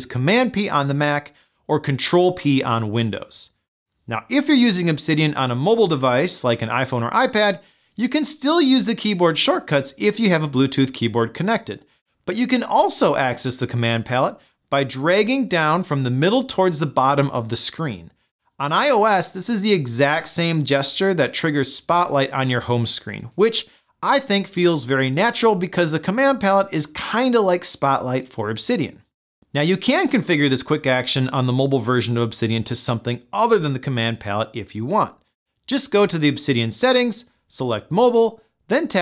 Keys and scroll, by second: 0.3 super+p.